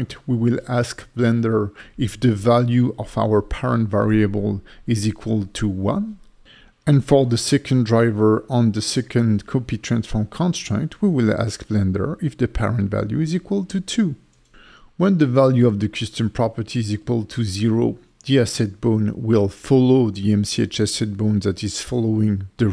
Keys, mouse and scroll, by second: 3.6 =, 3.6 BackSpace, 3.8 =, 7.1 right click, 14.8 click, 15.3 click, 16.7 click, 17.1 g, 18.3 right click, 19.3 click, 19.5 click, 20.0 click, 21.2 click, 21.5 click.